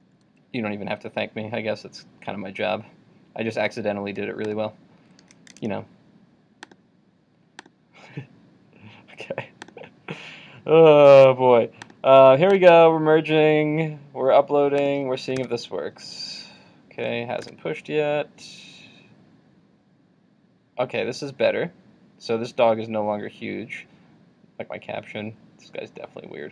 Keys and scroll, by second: 15.4 super+r, 17.6 super+r.